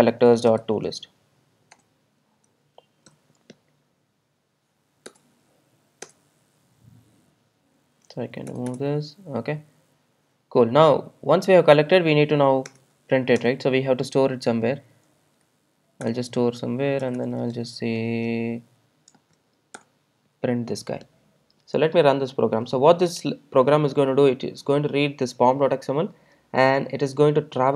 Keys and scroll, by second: 1.9 Return, 5.1 alt+Return, 12.8 alt+Return, 18.0 Return, 19.7 Tab, 20.5 Return.